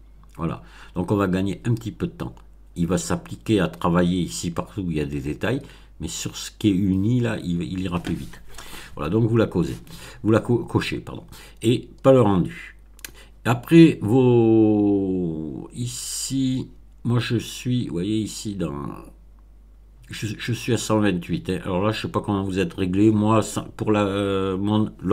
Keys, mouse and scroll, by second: 13.5-14.4 scroll down 4, 16.0-16.8 scroll down 4, 17.6 scroll down 2.